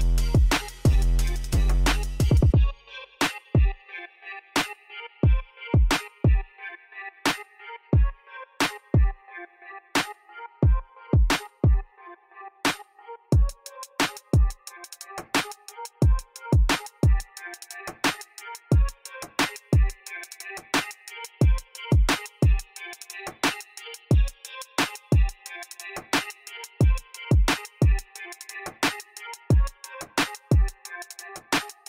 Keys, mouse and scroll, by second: 1.3 s, 4.6 w, 6.5-14.5 middle drag, 16.0 q, 17.3 e, 21.2 q, 26.9 click.